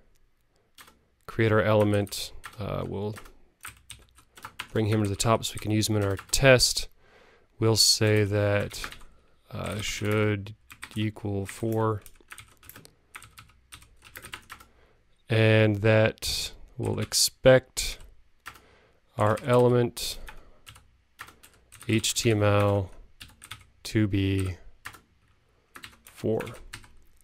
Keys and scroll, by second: 2.5 alt+Return, 3.8 alt+shift+Up, 12.6 super+Right, 23.3 super+Right, 26.4 super+Right.